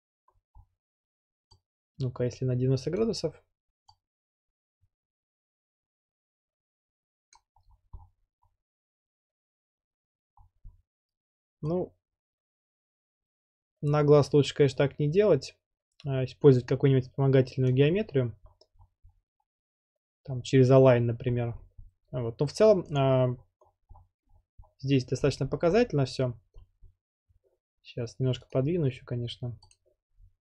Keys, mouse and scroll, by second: 0.3 scroll down 3, 0.4-1.6 scroll, 3.0 click, 7.3 click, 7.6-9.0 scroll, 10.4-11.6 scroll, 11.9 scroll, 17.7 click, 18.0 scroll, 18.8-20.2 scroll, 21.3 scroll, 21.3-22.9 scroll up 13, 22.9 scroll up 1, 23.0 click, 23.6-24.1 scroll, 24.3-25.2 scroll down 20, 25.2-25.8 scroll up 12, 25.8 scroll, 26.6-27.1 scroll, 27.3 scroll down 10, 28.5 right click, 29.7 click, 30.2-30.4 scroll.